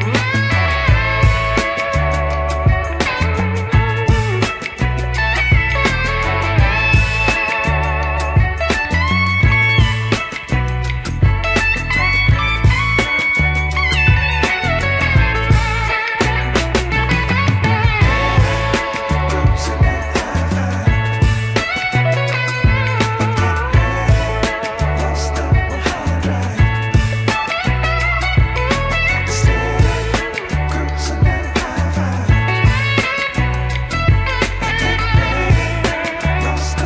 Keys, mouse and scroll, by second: 7.9 ctrl+r, 14.5 ctrl+r, 18.5 click, 19.6 alt+click, 20.7 ctrl+b, 27.0 Tab, 27.4 click, 28.1 click, 28.2 Tab, 29.0 alt+click, 29.9 ctrl+b, 31.8 Tab, 32.8 Tab, 35.8 Tab.